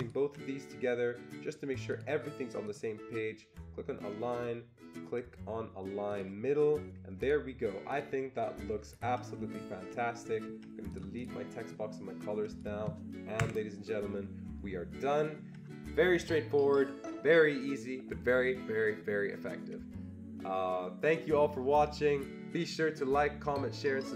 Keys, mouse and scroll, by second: 1.9 ctrl+click, 2.7 ctrl+click, 6.1 click, 7.2 click, 7.9 click, 8.8-9.1 ctrl+scroll down 1, 9.5-9.8 ctrl+scroll up 1, 10.4 ctrl+scroll down 1, 11.1 click, 12.0 click, 13.4 Delete, 14.4 ctrl+scroll up 1, 14.9 ctrl+scroll up 2.